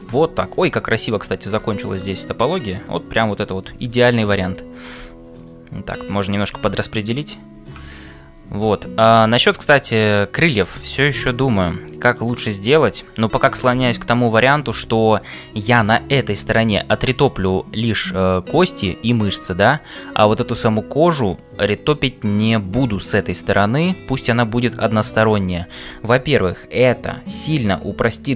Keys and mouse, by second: 0.6 middle click, 1.6 shift+middle click, 3.8 click, 6.1 click, 6.5 g, 7.9 middle click, 8.5 click, 10.4 click, 10.9 g, 12.2 click, 12.7 g, 14.1 middle click, 14.6 middle click, 15.5 middle click, 24.2-25.7 middle drag.